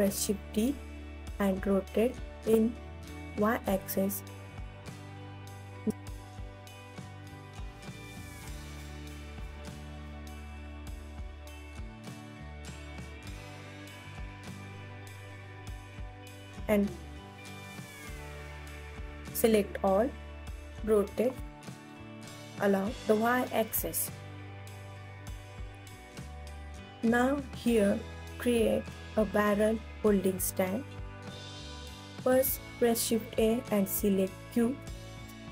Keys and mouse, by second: 1.5 click, 2.1 ctrl+s, 2.5-3.3 alt+middle drag, 3.4 KP_1, 3.7 click, 3.9 ctrl+s, 6.1 g, 7.1 click, 7.7 ctrl+s, 9.0-9.6 alt+middle drag, 9.6 click, 10.0 KP_1, 10.4 g, 10.5 ctrl+alt+s, 10.5 alt+click, 11.2 ctrl+s, 11.4 KP_1, 13.1 middle click, 13.2 KP_1, 13.2 g, 14.7 click, 15.0 KP_2, 15.3 KP_3, 15.8 click, 16.3 ctrl+s, 16.6-17.4 alt+drag, 17.7 ctrl+s, 17.8 KP_1, 19.0 middle click, 19.7 ctrl+s, 20.5 click, 21.1 r, 21.6 y, 21.8 KP_9, 21.9 KP_0, 22.2 click, 22.5 ctrl+s, 22.8-23.1 alt+middle drag, 22.9 alt+click, 23.1-24.0 alt+drag, 23.9 right click, 24.1 KP_1, 25.0 ctrl+s, 26.8-30.6 typing, 27.0 middle click, 27.1 click, 31.3 Escape, 31.6 ctrl+z, 31.9 s, 32.1 y, 32.9 click, 33.7 r, 33.9 s, 34.3 click, 34.5 KP_1, 35.0 alt+z, 35.4 Tab.